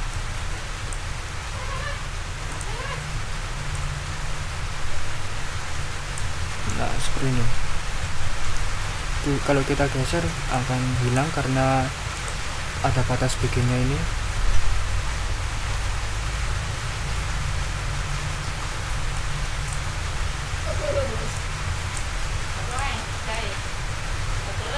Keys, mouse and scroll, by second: 0.1 ctrl+click, 1.3 ctrl+z, 2.5 click, 3.7-4.3 drag, 5.4 click, 6.2 ctrl+click, 6.5 ctrl+z, 7.1-7.8 ctrl+scroll down 4, 8.0 ctrl+middle click, 8.9 ctrl+scroll up 1, 10.5 click, 12.1-12.4 scroll up 2, 15.6 ctrl+y, 17.9 ctrl+scroll down 2, 18.6 ctrl+scroll up 2, 19.1 ctrl+click, 19.8 ctrl+z, 21.3 click, 22.1 ctrl+z, 22.7 ctrl+click, 23.3 click.